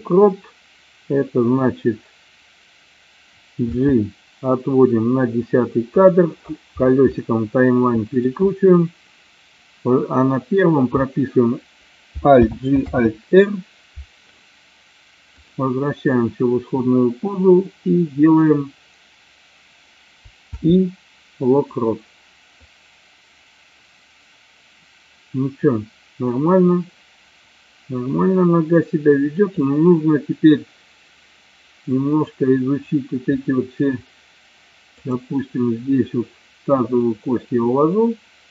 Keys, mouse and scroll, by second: 3.8 g, 6.1 click, 7.3 middle click, 12.4 alt+g, 12.9 alt+r, 15.4 click, 22.9-29.7 drag, 35.2 click, 36.8-38.5 drag.